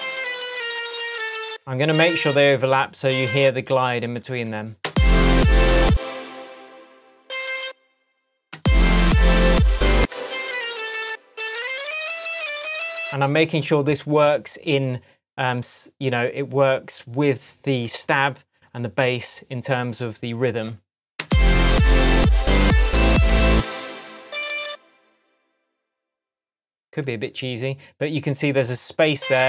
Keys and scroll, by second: 2.0 alt+BackSpace, 2.6 BackSpace, 4.8 super+space, 8.5 space, 9.9 space, 21.2 space, 23.5 space, 24.7 Right.